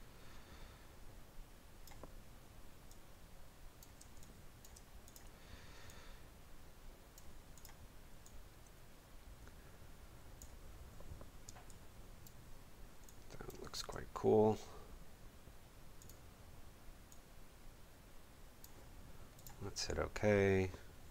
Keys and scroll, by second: 4.0 space, 11.4 space.